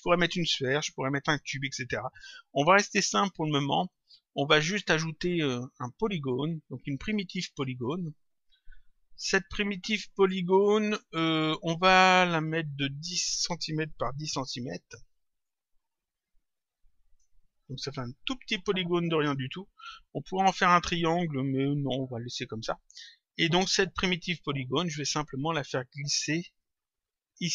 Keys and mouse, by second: 3.7 click, 12.7 click, 16.0 click, 17.4 click, 22.1 click, 24.7 click, 26.5 click.